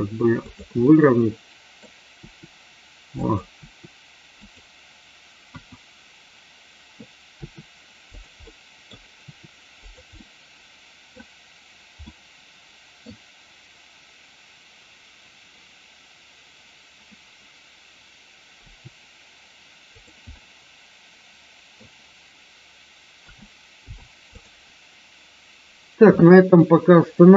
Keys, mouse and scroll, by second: 0.5 click, 0.8 middle click, 3.1 click, 3.5 r, 4.3 click, 7.3 r, 8.1 click, 8.5 middle click, 9.2 r, 9.7 click, 10.2-11.1 middle drag, 12.0-13.0 middle drag, 18.6 r, 19.9 click, 20.3-21.7 middle drag, 23.2 a, 23.7 i.